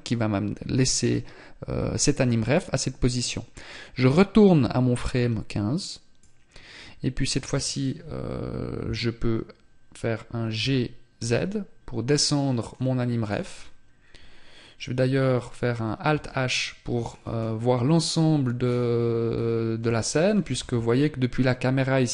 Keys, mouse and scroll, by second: 13.5-15.5 scroll down 4, 15.5 alt+h, 16.5-17.9 scroll up 4, 17.9 scroll down 4, 18.7 scroll down 1, 19.9 KP_0.